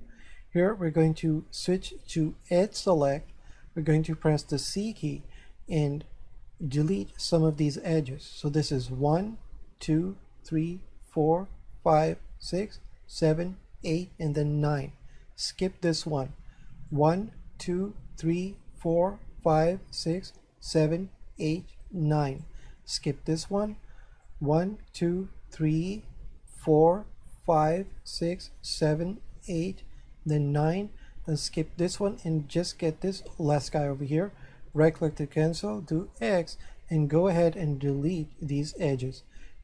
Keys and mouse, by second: 2.5 click, 4.8 c, 8.9 click, 16.9 click, 24.3 click, 33.2 click, 34.8 right click, 36.1 x, 38.7 click.